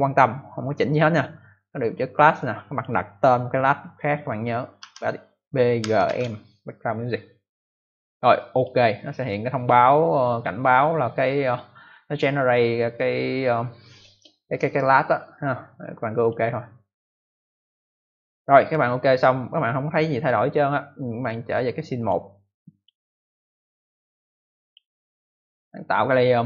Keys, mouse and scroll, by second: 2.3 click, 4.7 b, 5.7-6.5 typing, 8.4 click, 16.1 click, 21.1 click, 21.9 click, 22.7 click, 24.0 click, 25.9 click, 26.0 click.